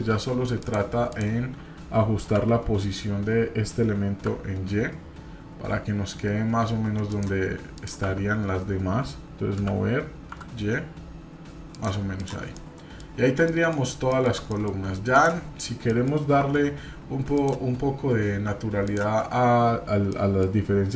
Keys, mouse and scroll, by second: 0.1 Tab, 0.6 click, 1.1 click, 2.3 g, 7.7 click, 8.0 y, 9.6 g, 12.2 click, 12.5-13.0 middle drag, 13.1-13.4 scroll up 1, 13.4 middle drag, 14.1 shift+middle click, 14.5 middle click, 15.1 click, 15.9 middle click, 16.4 Tab, 17.3 click, 17.7-18.2 scroll up 1, 18.8 alt+click, 20.1 middle click.